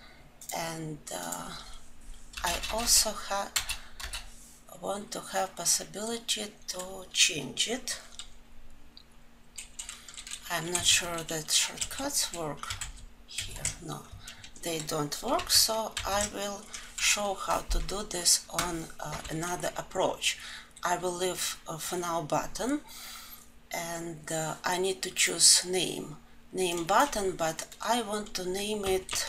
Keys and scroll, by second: 15.4 ctrl+z, 20.2 ctrl+z.